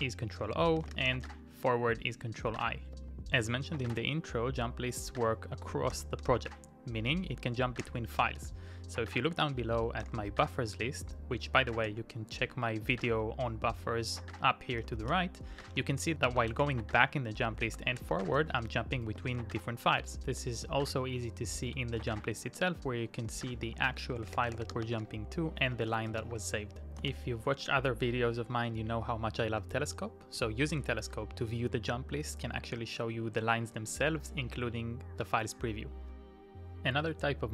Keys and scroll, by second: 0.7-1.5 typing, 3.1 Up, 3.8 Return, 6.1 ctrl+o, 7.8 ctrl+i, 11.9 ctrl+i, 15.0 shift+;, 15.6 k, 16.3 BackSpace, 17.3-19.3 typing, 21.7 Return, 23.6-26.6 typing, 27.0 Return, 28.9 Up, 29.3 Down, 29.5 Up, 34.1 Down, 36.1 Return, 36.5-37.5 typing.